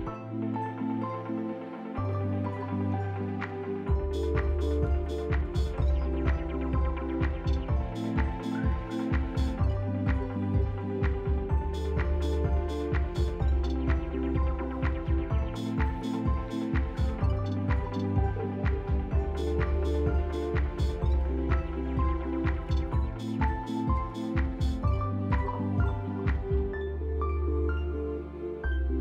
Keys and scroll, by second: 0.8 t, 3.1 z, 3.7 s, 7.7 F4, 8.3 F4, 9.9 s, 11.6 z, 13.6 F4, 18.0 F4, 18.5 s, 25.9 F4, 27.1 s.